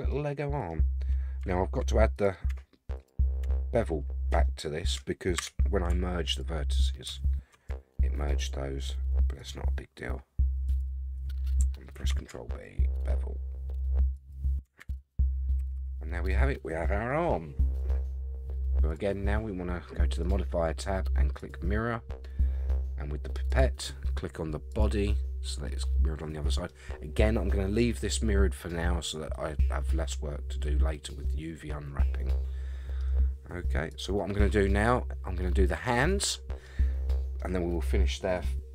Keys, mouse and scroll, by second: 0.1 middle click, 0.8 scroll up 3, 1.5-1.8 shift+middle drag, 2.1 click, 2.5 Tab, 3.0 click, 3.4 Tab, 3.7-4.3 scroll up 3, 4.4 shift+middle click, 4.9 shift+click, 5.4 2, 6.3 alt+click, 8.3 alt+shift+click, 9.4 alt+shift+click, 10.7 alt+shift+click, 11.9 ctrl+b, 14.4 shift+right click, 14.8 Tab, 15.1 scroll down 5, 15.6 a, 15.8 a, 16.0-18.4 middle drag, 18.9 click, 20.2-21.5 drag, 23.5 click, 25.7-26.7 middle drag, 28.9 scroll down 4, 29.3-33.0 middle drag, 33.9 click, 34.4 middle click, 35.4-35.8 middle drag, 36.1-36.6 middle drag, 37.1-37.4 middle drag, 37.5 scroll up 2.